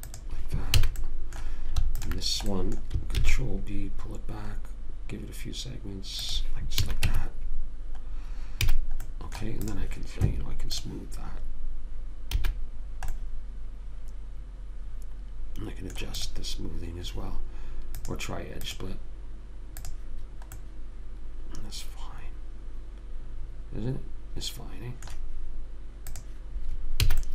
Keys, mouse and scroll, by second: 1.1 a, 2.3 click, 3.5 ctrl+b, 4.2 middle click, 4.7 click, 7.1 a, 7.4 Tab, 9.0 a, 9.4 click, 10.1-12.7 drag, 12.7 a, 13.5-14.8 middle drag, 16.6 click, 21.0-22.6 middle drag, 26.4 click.